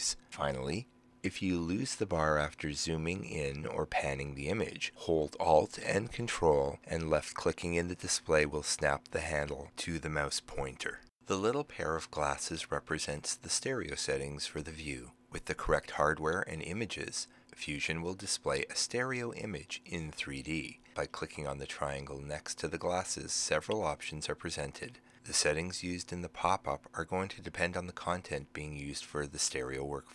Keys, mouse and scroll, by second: 7.0-11.3 ctrl+alt+drag, 14.4 click.